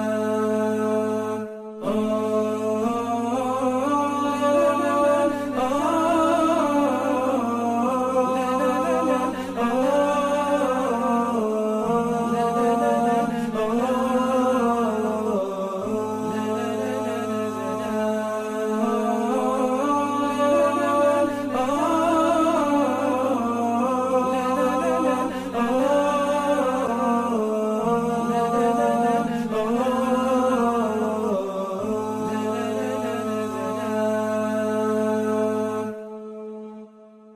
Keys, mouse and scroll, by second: 3.0 typing, 9.1 typing, 20.9 typing, 22.9 scroll down 1, 23.5 typing, 23.7-24.0 alt+scroll up 1, 26.3 alt+scroll down 1, 27.1-27.4 alt+scroll up 1, 27.7 alt+scroll down 1, 29.0 scroll up 1, 29.6 v, 30.7-31.4 scroll down 2, 31.7 alt+scroll up 1.